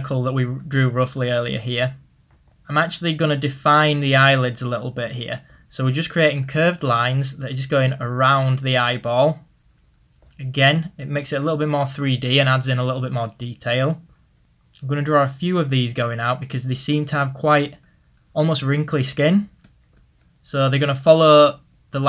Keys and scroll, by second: 1.9 ctrl+z.